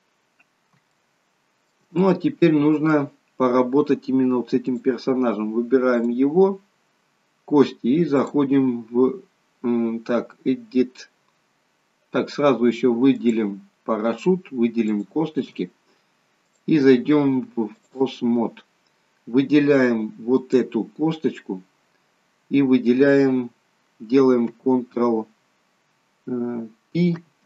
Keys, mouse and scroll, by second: 0.4 scroll down 2, 1.0 shift+middle click, 2.0 middle click, 4.7 click, 5.9 click, 6.6 scroll up 3, 8.2 click, 12.4 scroll down 2, 13.1 click, 14.9 shift+click, 16.5 click, 18.5 scroll up 3, 20.3 click, 27.1 ctrl+p.